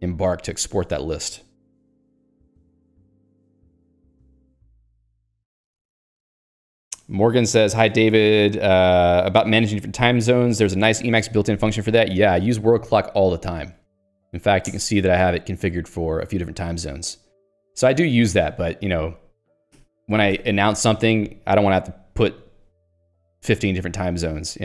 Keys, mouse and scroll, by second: 13.8-14.7 typing, 14.8 Return, 17.2 scroll down 1, 17.6 scroll up 1, 18.3-18.8 scroll up 1, 18.8 click, 19.8 q, 20.4 Escape.